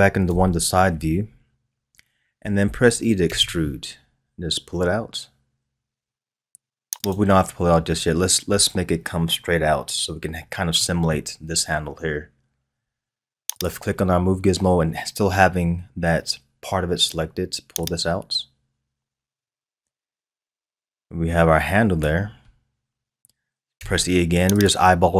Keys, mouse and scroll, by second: 0.2 KP_0, 0.3 KP_1, 3.3 e, 10.4-10.8 scroll down 1, 10.8-13.5 middle drag, 13.5 click, 17.8-20.8 drag, 23.8 e.